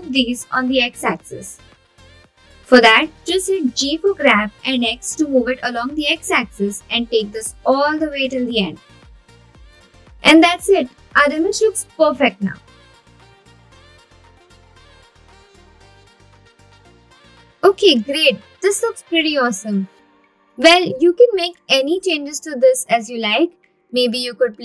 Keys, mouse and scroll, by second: 1.3 x, 7.5 click, 10.4 Tab, 12.3-13.8 right drag, 15.0 scroll down 1, 15.7 scroll down 1, 17.1 click, 20.5 click, 22.0 click.